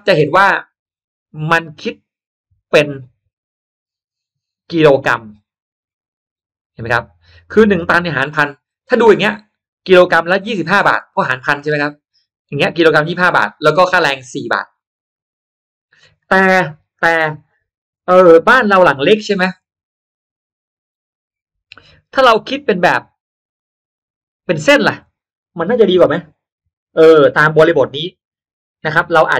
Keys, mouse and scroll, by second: 2.3 click, 12.4 click, 13.9-15.7 drag, 18.4 click.